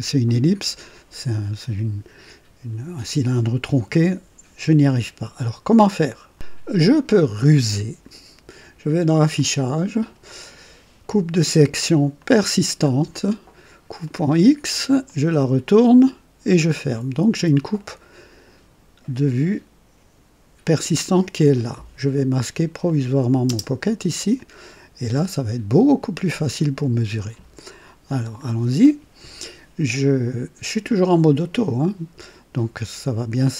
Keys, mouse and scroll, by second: 6.3 click, 9.3 click, 12.1 click, 13.9 click, 15.0 click, 16.9 click, 17.8 right click, 22.8 click, 23.4 space, 24.3-25.2 drag, 25.9 click, 26.5-27.3 right drag, 28.2 scroll up 1.